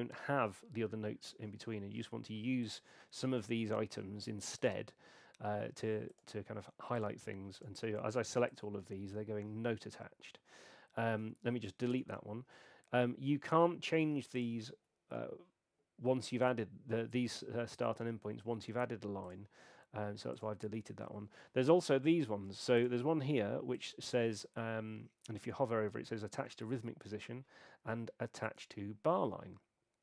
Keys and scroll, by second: 11.9 BackSpace.